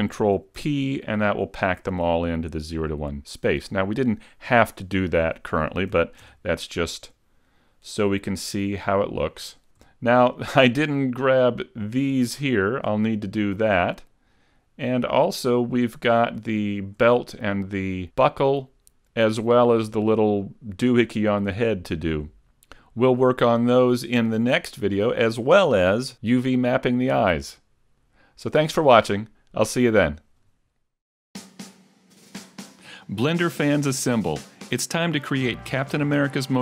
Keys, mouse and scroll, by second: 0.7 ctrl+p, 3.7 a, 5.9 a, 6.3 Tab, 6.7 middle click, 9.3 scroll down 2, 10.3 scroll up 2, 10.7 middle click, 11.5 scroll up 2, 14.0-14.9 scroll down 5, 14.9 middle click, 15.5-16.1 scroll down 1, 16.1-16.5 scroll down 1, 16.5 shift+middle click, 17.4 middle click, 21.7 shift+middle click.